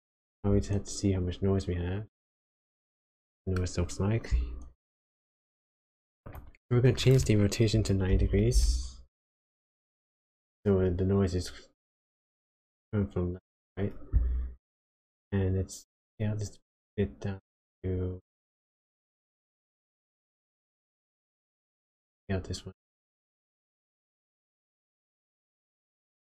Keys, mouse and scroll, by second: 1.7-2.5 scroll up 4, 2.8 middle click, 6.2 click, 16.1 shift+click, 21.6 shift+click.